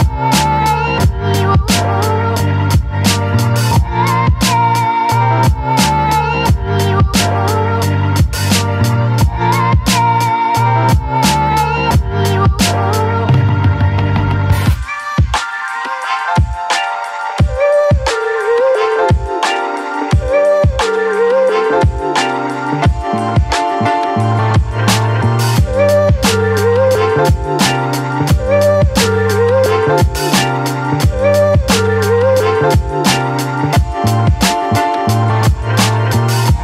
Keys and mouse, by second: 3.0-3.5 [, 3.6 click, 3.6 [, 4.3 ctrl+z, 4.6 click, 5.4 click, 5.9 ctrl+z, 6.5 ctrl+z, 6.8 click, 8.0 click, 8.4 ctrl+z, 8.7 click, 9.5 ctrl+z, 9.5 click, 10.9 right click, 11.6 right click, 12.2 ctrl+z, 12.3 ctrl+z, 12.5 right click, 12.8 ctrl+z, 13.1 right click, 13.5 ctrl+z, 13.7 right click, 14.3 click, 14.9 ctrl+z, 15.2 click, 15.8 ctrl+z, 16.1 click, 18.8 click, 19.2 ctrl+z, 19.5 click, 19.9 click, 20.3 ctrl+z, 23.7 middle click, 24.3 middle click, 24.6 middle click, 26.9 middle click, 27.7 shift+middle click, 28.5 shift+middle click, 28.9 middle click, 29.2 shift+middle click, 29.7 shift+middle click, 29.9 middle click, 32.7 middle click, 33.8 shift+middle click, 34.4 middle click.